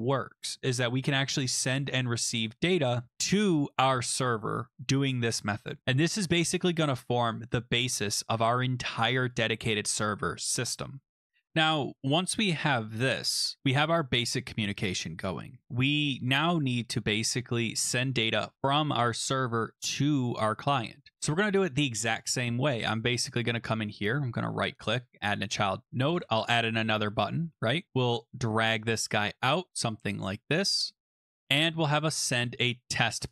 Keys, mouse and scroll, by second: 9.3 click, 11.1 click, 11.5 click, 22.6 click, 23.2 click, 24.3 right click, 25.1 click, 26.1 Return, 28.2 click, 29.2 click, 31.2 click, 33.2 click.